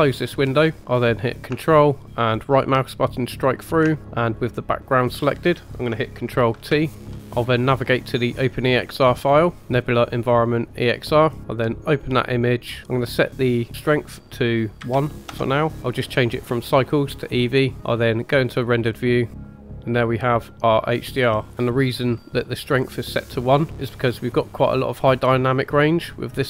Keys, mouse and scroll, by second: 0.8-1.4 scroll down 2, 2.7 ctrl+right click, 4.0-6.0 drag, 6.6 ctrl+t, 7.1 g, 8.6 click, 13.0-15.4 drag, 16.6-17.3 drag, 19.3 click, 19.5-21.4 middle drag, 22.2-24.0 middle drag, 24.3-26.4 drag.